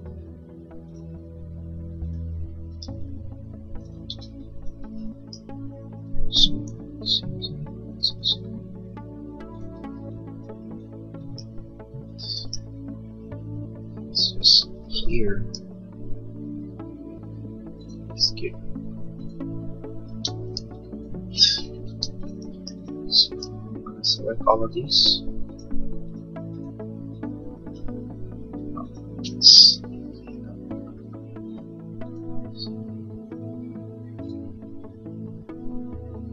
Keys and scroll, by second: 3.0 e, 4.2 ctrl+z, 6.7 l, 9.9 e, 15.6 l, 20.2 space, 20.8 e, 22.0 space.